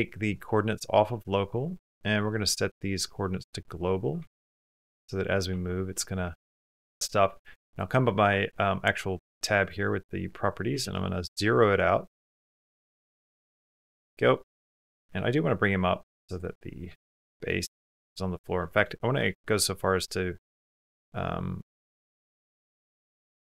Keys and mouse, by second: 0.6-3.2 drag, 4.0 g, 5.8 middle click, 6.2 click, 6.9 click, 9.6-10.6 drag, 14.1 middle click, 14.8 g, 16.4 click, 16.8 shift+click, 17.0 click, 17.5 Tab, 18.5 shift+middle click, 19.0 3, 19.1 click, 19.2 middle click, 20.1 middle click, 20.3 click, 20.4 middle click, 20.5 click, 20.6 middle click, 21.6 shift+click, 22.5 alt+z, 23.3 click.